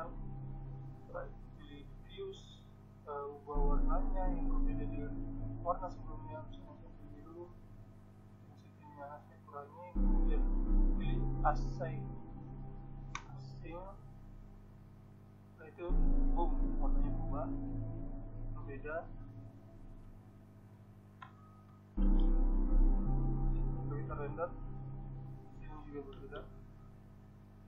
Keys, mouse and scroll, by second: 0.4-1.9 drag, 3.7-11.2 drag, 15.9-17.7 drag, 19.4-21.3 middle drag, 21.6-23.1 drag, 23.2-24.2 middle drag, 24.2 Tab.